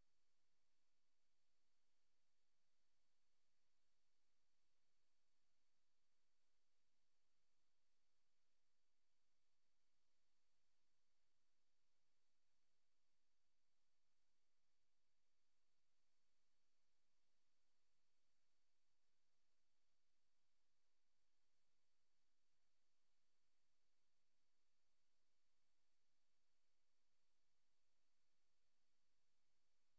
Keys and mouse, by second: 0.0 click, 1.2 click, 1.8 click, 2.8 click, 4.4 click, 5.9 click, 7.6 click, 8.2 click, 9.4 click, 10.0 click, 13.3 Right, 16.9 click, 19.3 drag, 20.8 click, 23.9 click, 24.6 click, 25.0 click, 27.4 click.